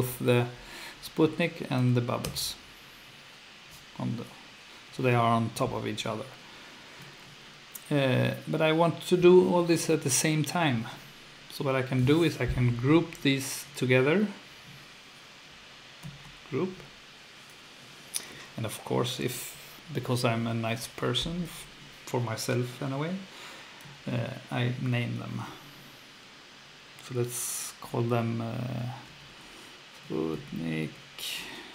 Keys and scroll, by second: 2.2 F2, 16.0 super+g, 28.8-31.7 typing.